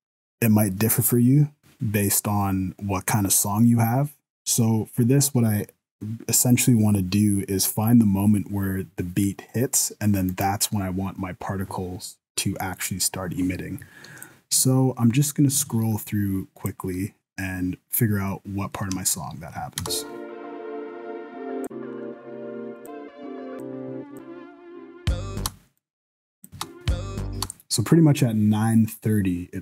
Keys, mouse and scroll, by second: 8.6-10.3 scroll up 1, 10.3 right click, 14.2 click, 18.2 scroll up 1, 18.4 middle click, 19.0 shift+middle click, 19.8 space, 21.6 click, 22.8 click, 23.5 click, 24.1 click, 25.4 space, 25.8 click, 26.5 space, 27.4 space, 28.9 click.